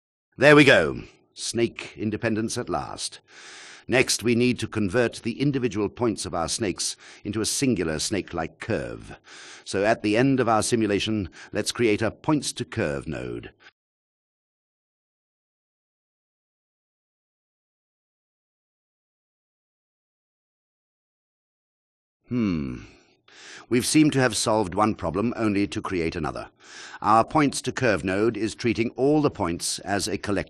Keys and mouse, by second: 4.1 click, 6.0 click, 9.0 alt+shift+click, 13.9 shift+a, 19.2 click, 22.2 ctrl+alt+drag, 23.4 click, 28.0 click, 30.2 click.